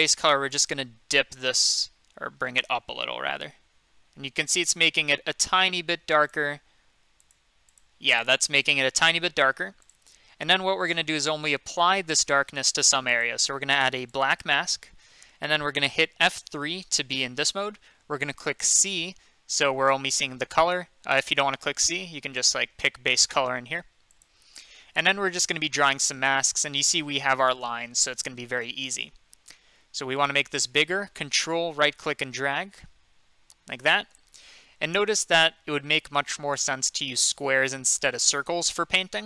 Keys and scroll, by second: 16.3 F3, 19.5 c.